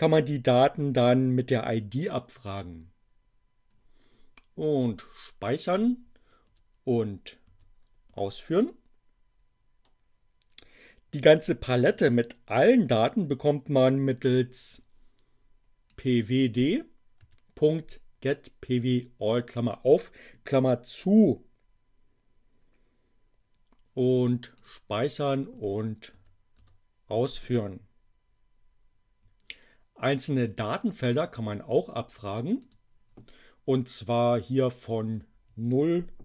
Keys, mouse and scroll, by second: 4.6 click, 5.5 click, 6.5 Up, 8.0 Return, 15.9 click, 17.2 Delete, 24.6 click, 25.2 click, 26.1 Up, 26.5 Return, 32.6 click.